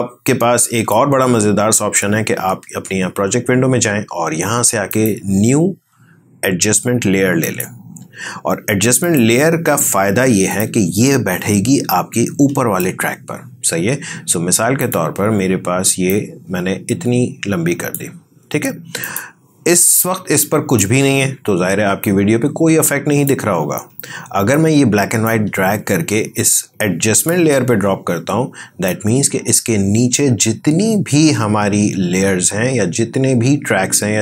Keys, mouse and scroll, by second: 13.2-34.2 drag.